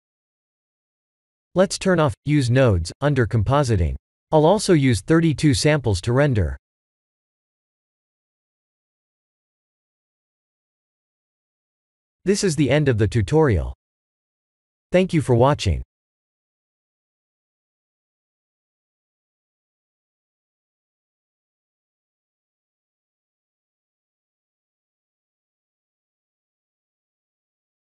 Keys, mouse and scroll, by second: 1.0 click, 2.7 click, 4.4 click, 5.0 click, 6.4 click, 7.5 click, 9.7 click, 10.1 click, 10.6 ctrl+s.